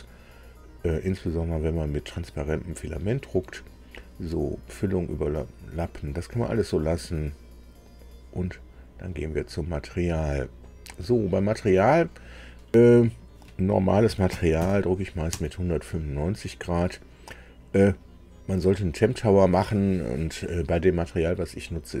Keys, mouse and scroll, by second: 8.5 click, 10.2 click, 11.9 click, 14.0 KP_1, 14.3 KP_9, 14.6 KP_5, 15.3 Tab.